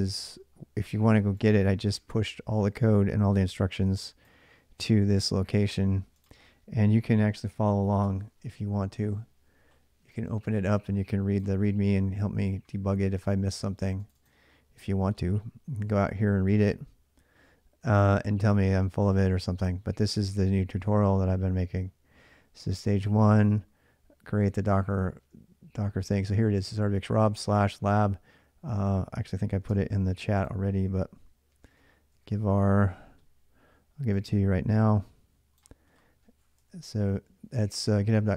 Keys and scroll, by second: 6.7-7.8 typing, 7.8 Return, 29.5 alt+Tab, 31.0-32.4 typing, 36.4 Return.